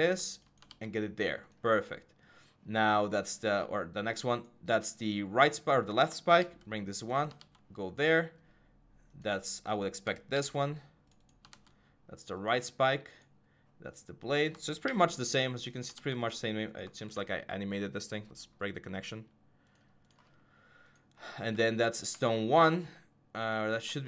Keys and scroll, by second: 0.5 ctrl+v, 6.2 ctrl+c, 7.2 ctrl+v, 10.1 ctrl+c, 11.3 ctrl+v, 14.7 ctrl+c, 15.7 ctrl+v, 16.8 ctrl+a.